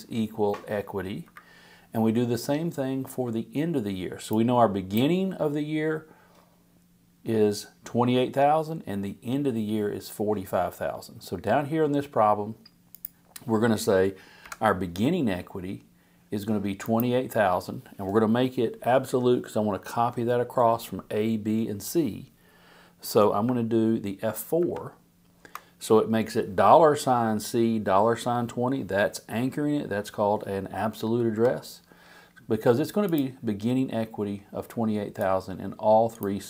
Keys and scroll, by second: 1.2 Up, 14.4 =, 24.6 F4, 31.3 Return.